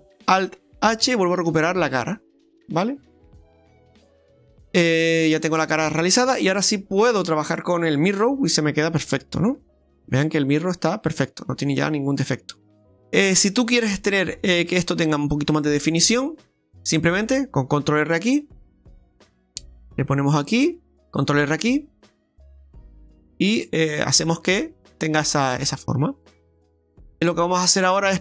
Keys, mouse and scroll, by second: 1.0 alt+h, 2.2 scroll down 1, 2.5 right click, 3.5 middle click, 7.1 click, 7.6 middle click, 9.6 Tab, 9.9 scroll up 2, 10.2 middle click, 12.9 shift+middle click, 13.2 middle click, 13.7-14.1 scroll up 2, 14.2 middle click, 15.6 Tab, 18.3 ctrl+r, 21.2 ctrl+r, 24.2 middle click.